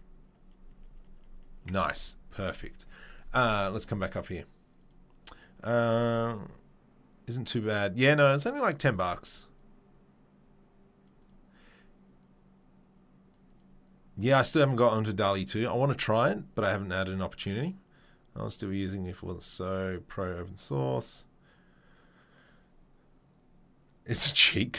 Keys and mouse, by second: 1.9 Tab.